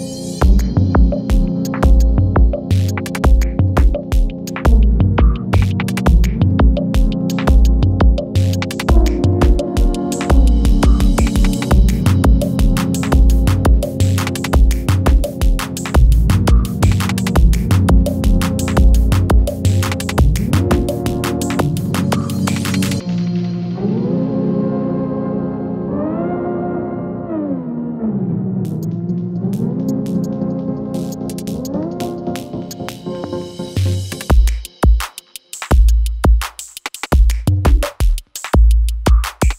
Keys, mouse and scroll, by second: 3.8 ctrl+d, 4.5-6.1 drag, 6.5 u, 7.4-10.9 drag, 18.3-19.3 scroll down 1, 19.3 click, 19.6-20.2 scroll up 1, 20.5 shift+click, 21.1 r, 22.4 click, 22.6-24.2 typing, 24.8 click, 26.6-27.1 scroll down 1, 28.1 shift+click, 29.1 click, 30.1 Return, 31.6-32.2 click, 32.2 space, 34.9-35.8 drag, 36.4-37.8 typing, 38.3 click, 38.9 space.